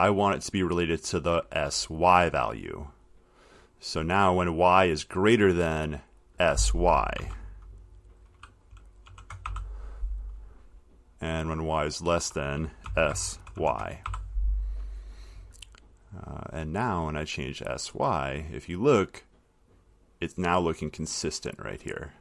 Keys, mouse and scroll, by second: 1.6 click, 4.6 click, 6.3 click, 7.4 s, 9.0-10.2 typing, 12.4 click, 13.1-14.8 typing, 16.2 click.